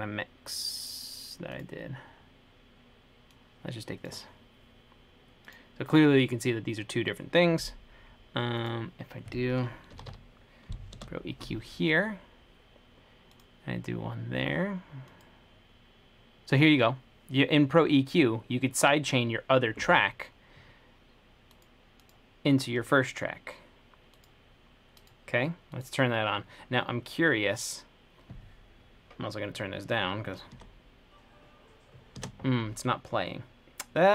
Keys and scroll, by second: 9.9-10.8 typing, 11.2 Return.